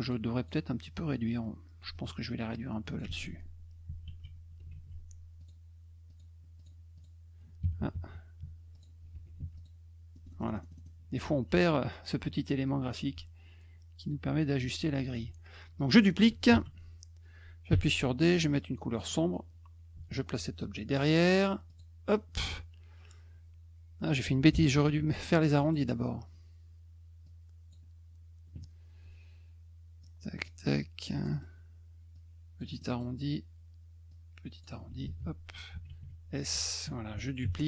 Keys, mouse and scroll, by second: 0.0 click, 0.4 click, 1.9-3.0 ctrl+drag, 3.2 ctrl+z, 4.2 ctrl+z, 4.7 ctrl+shift+z, 5.4 click, 6.1 click, 6.6 click, 6.9 click, 8.7 click, 9.2 F1, 9.4 F2, 9.5 click, 10.1 middle click, 10.3 middle click, 10.4 middle click, 10.6 middle click, 10.7 middle click, 12.8-14.6 drag, 15.2 F1, 16.5 ctrl+d, 17.7 d, 18.9 click, 19.9 F1, 21.7 click, 24.9 F2, 25.3 click, 25.6 middle click, 27.2 click, 30.0 click, 31.1 middle click, 31.3 middle click, 32.1 click, 32.8 middle drag, 34.1 click, 35.0 ctrl+a, 35.9 shift+s, 36.5 F1, 37.4 ctrl+d.